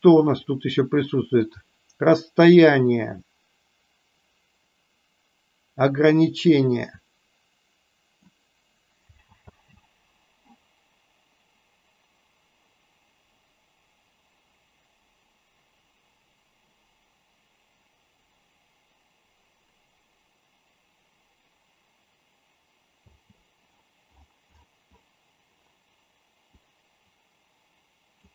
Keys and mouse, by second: 6.2-8.3 drag, 9.3 space, 23.0 space, 26.6-28.2 drag.